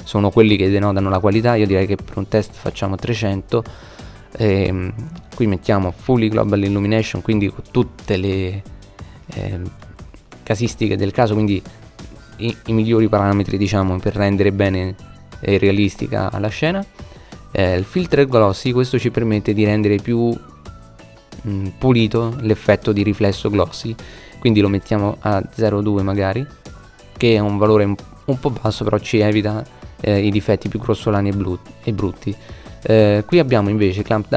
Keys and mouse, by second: 1.1 KP_0, 3.7-5.4 drag, 6.0-8.4 middle drag, 10.3 middle click, 22.4-24.3 middle drag.